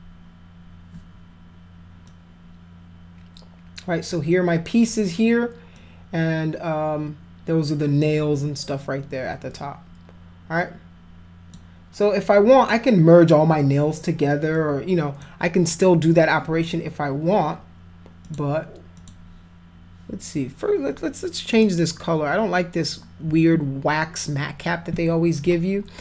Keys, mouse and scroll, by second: 2.0-4.1 drag, 5.7-11.5 drag, 14.5 click, 18.2 click, 19.0 click, 21.5 click.